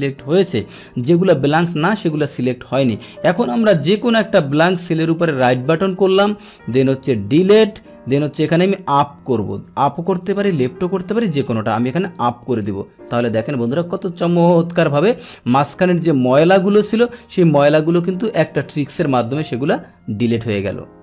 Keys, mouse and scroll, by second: 1.0-1.7 scroll down 1, 1.7-2.7 scroll down 1, 2.7-5.5 scroll down 1, 5.5 right click, 7.3 click, 12.1 click, 13.1 click, 14.5-15.1 scroll down 1, 15.1-16.1 scroll down 1, 16.1-18.4 drag.